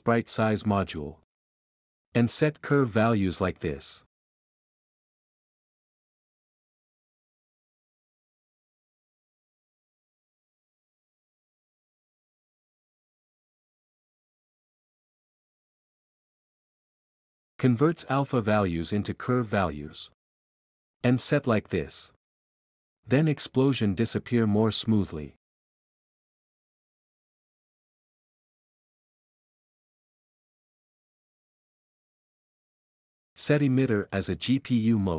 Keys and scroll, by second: 4.2-5.6 typing, 9.8-12.8 typing, 14.4-18.0 typing, 20.7-21.9 typing, 23.9-25.9 typing, 27.3-28.2 typing, 31.0 typing, 32.1 typing.